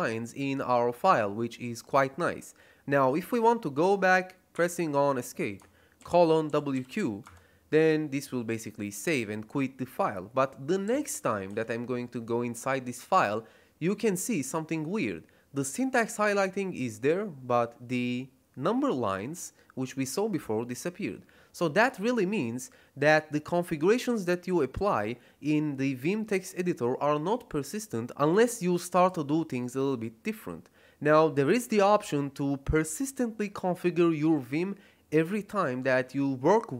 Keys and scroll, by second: 4.5 Escape, 5.7-7.2 typing, 11.4 Return.